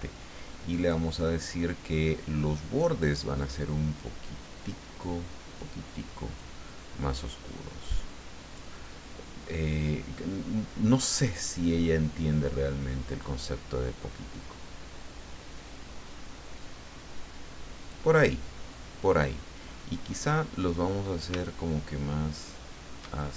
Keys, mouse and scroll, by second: 0.8 click, 3.4-6.5 drag, 7.1-8.7 drag, 13.2-18.1 drag, 21.4-23.3 shift+drag.